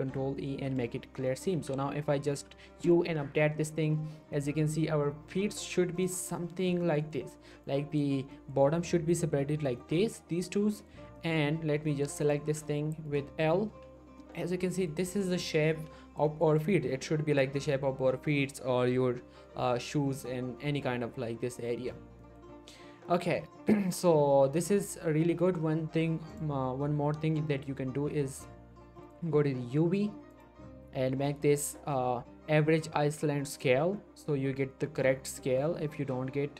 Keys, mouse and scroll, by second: 0.0 ctrl+e, 0.8 click, 1.0 scroll down 1, 1.3 middle click, 1.5 a, 1.8-2.3 scroll down 1, 2.3 u, 2.8 click, 3.3-3.6 scroll down 1, 4.0 shift+middle click, 4.0 scroll up 1, 4.3 shift+middle click, 5.9 click, 6.4 shift+middle click, 6.6 shift+scroll up 1, 6.8 shift+middle click, 7.6-8.2 click, 8.3 middle click, 9.6 scroll down 1, 9.8 middle click, 10.4-10.7 scroll up 1, 10.7 middle click, 11.3-11.8 scroll up 1, 12.0 middle click, 12.2 click, 12.4 g, 13.1 right click, 13.7 l, 14.2 middle click, 14.4-14.7 scroll up 1, 14.7 middle click, 14.9-15.4 scroll up 1, 15.4 middle click, 15.7 l, 16.2 middle click, 21.3 scroll down 1, 21.7-22.1 middle click, 22.9-23.6 scroll down 1, 24.0 scroll down 1, 24.2 scroll up 1, 24.4 a, 25.0-25.3 scroll up 1, 25.3 middle click, 26.3 click, 29.0 click, 33.5 click, 34.9-35.3 scroll up 1, 35.4 middle click, 35.6-36.2 scroll up 1, 36.2-36.5 scroll down 1.